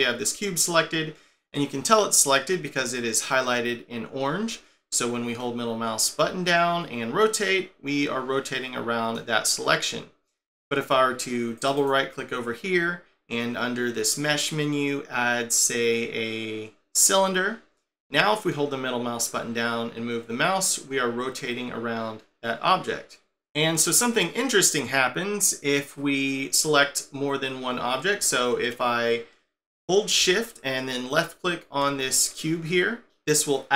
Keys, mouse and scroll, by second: 5.4 middle click, 11.6 right click, 11.8 right click, 18.5 middle click, 31.1 shift+click.